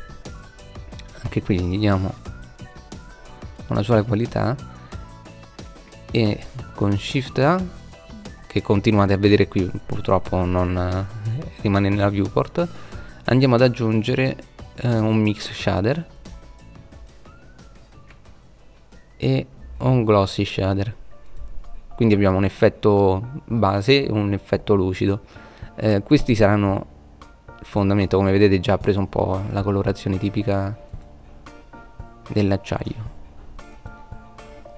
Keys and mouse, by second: 0.2 click, 1.7 right click, 3.0-6.8 drag, 6.8 shift+a, 15.8-16.4 drag, 16.4 shift+a, 24.6 click, 24.8 middle click, 26.5 middle click, 29.8 click, 34.3-34.7 middle drag.